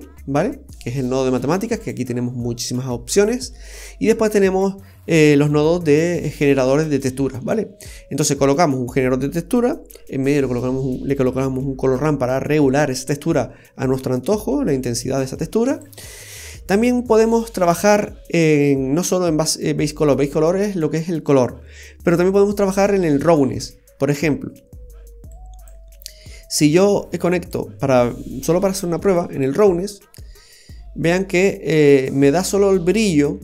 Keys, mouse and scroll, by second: 1.8 click, 3.2-3.5 scroll down 3, 3.5 middle click, 8.3-8.7 scroll down 1, 14.3 click, 16.2-16.6 scroll down 2, 16.4-17.7 scroll up 12, 25.3 click, 26.1 scroll down 3, 27.5 click, 31.0 scroll up 1, 31.2 middle click.